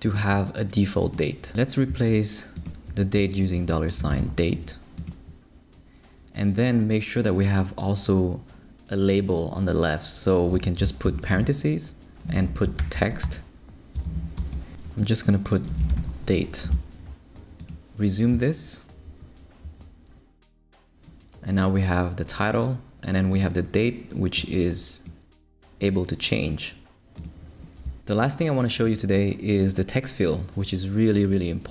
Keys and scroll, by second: 3.3-4.7 typing, 10.5 space, 11.0 shift+[, 11.3 shift+Return, 12.1-14.3 typing, 15.5-16.4 typing.